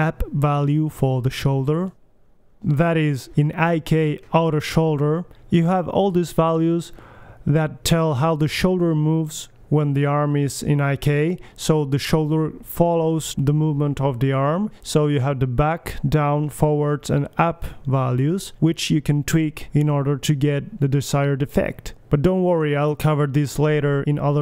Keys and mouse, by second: 0.4 middle click, 0.5-2.3 middle drag, 2.3 click, 2.6-4.9 drag, 5.1-6.4 drag, 6.6-8.0 drag, 8.0-13.1 middle drag, 16.0-17.9 middle drag, 17.9 click, 19.9 g, 22.6-23.8 drag.